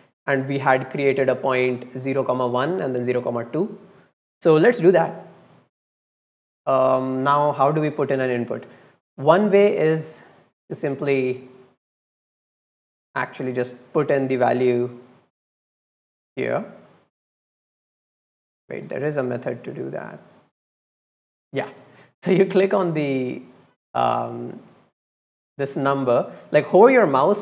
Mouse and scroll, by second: 5.6 click, 8.8 middle click, 9.4 drag, 10.4 click, 13.1 click, 14.4 click, 14.7 click, 15.1 click, 15.4 click, 16.0 click, 16.4 click, 17.1 middle click, 17.5 click, 18.4 middle click, 18.7 click, 19.6 click, 20.1 click, 20.6 click, 21.4 click, 21.7 click, 22.9 click, 23.7 click.